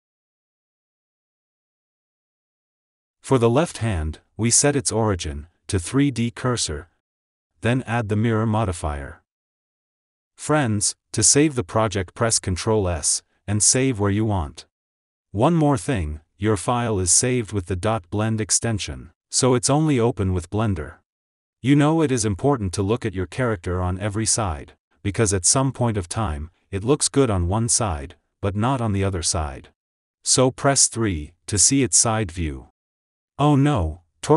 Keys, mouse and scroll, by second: 0.0 g, 1.5 f, 1.6 g, 2.3 Tab, 2.5 click, 2.6 shift+s, 4.9-7.5 drag, 9.8-10.7 drag, 11.9-12.3 scroll down 2, 12.3 ctrl+s, 12.4-12.8 shift+middle drag, 12.8 ctrl+s, 28.3 click, 29.5 click, 32.9 KP_3.